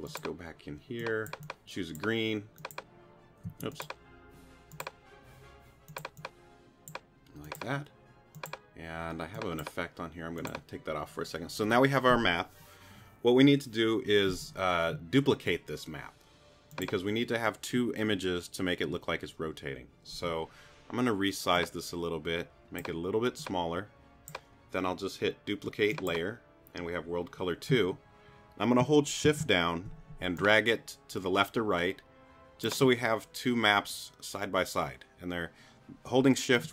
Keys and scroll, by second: 3.4 q.